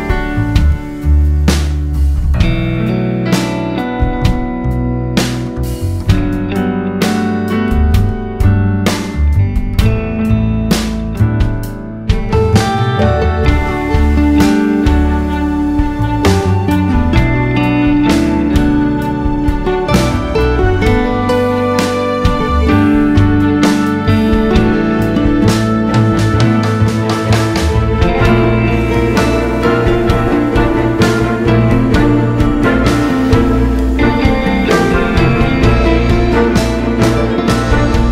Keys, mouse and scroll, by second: 0.9 `, 1.5 scroll up 2, 1.7 `, 5.2 click, 6.8 click, 7.5-10.8 drag, 12.4 `, 13.6-14.8 drag, 15.4 click, 16.6 KP_Divide, 16.9 alt+a, 17.2 scroll up 1, 17.4 ctrl+s, 18.2 click, 20.8-25.7 drag, 26.2 click, 27.1 click, 27.8 shift+d, 28.4-32.8 drag, 36.6 click.